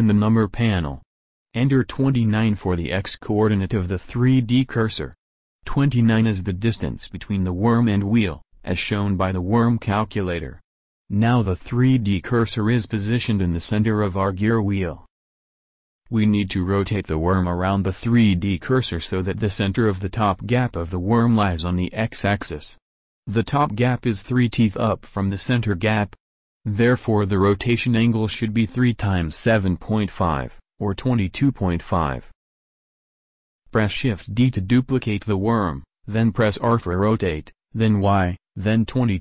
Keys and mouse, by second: 0.9-34.5 drag, 34.5-35.7 middle drag, 35.7 shift+d, 37.1 r.